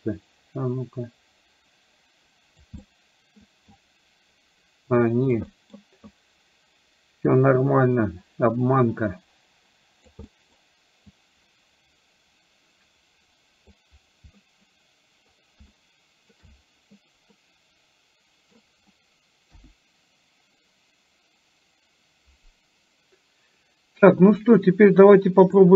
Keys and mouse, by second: 2.9 middle click, 3.9-5.4 drag, 5.5 middle click, 6.2-10.1 drag, 10.2 middle click, 11.2-13.7 drag, 14.5 middle click, 15.7 shift+middle click, 17.5-18.7 middle drag, 19.5 KP_1, 25.5 click.